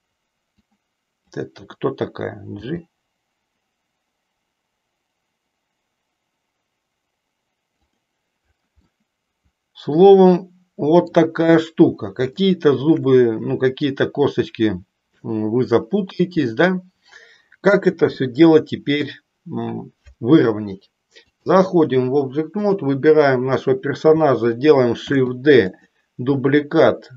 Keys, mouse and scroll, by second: 0.8 click, 2.5 g, 9.0-11.3 middle drag, 11.5 KP_1, 12.4 shift+middle click, 17.9 KP_3, 21.4 click, 25.0 shift+d, 25.8 click.